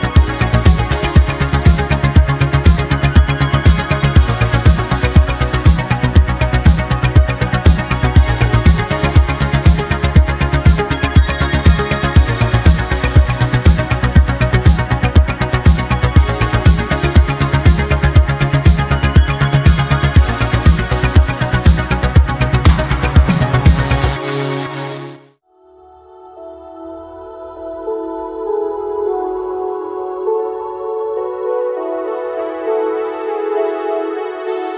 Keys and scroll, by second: 3.5 ctrl+z, 5.9 space, 6.5 ctrl+z, 14.2 space, 15.3 space, 18.1 ctrl+z, 19.4 space, 20.0 ctrl+z, 20.8 ctrl+z, 21.0 ctrl+z, 21.5 ctrl+z, 22.5 ctrl+z, 23.5 space, 25.1 ctrl+z, 27.7 space, 29.4 space, 29.8 space, 34.1 ctrl+z.